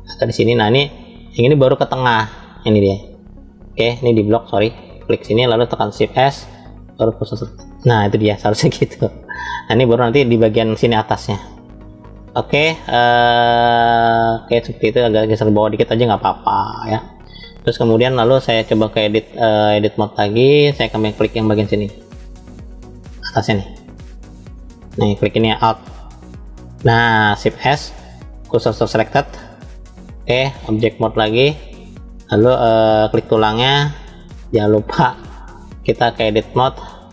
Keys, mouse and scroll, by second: 2.0-3.0 drag, 3.8 click, 4.4 click, 5.9 shift+s, 12.4-13.2 drag, 13.7-16.0 middle drag, 16.6 click, 18.7 click, 19.3-20.1 drag, 21.1-24.6 middle drag, 26.0 alt+click, 27.4 shift+s, 30.4-31.2 drag, 33.0 click, 35.7-36.7 drag.